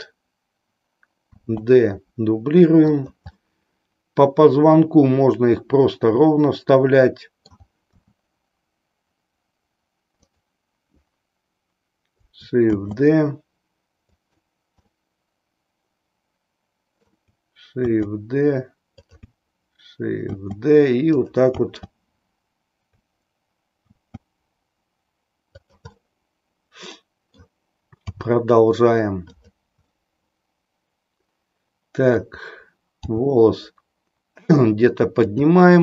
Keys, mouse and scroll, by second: 1.3 shift+d, 3.1 click, 3.6-7.7 middle drag, 8.1 r, 12.8 shift+d, 14.2 click, 14.9-17.2 middle drag, 17.8 shift+d, 21.3 click, 21.7 d, 23.9 shift+d, 26.0-27.4 middle drag, 28.2 g, 29.4 click, 29.9-32.4 middle drag, 33.1 g, 35.4 click.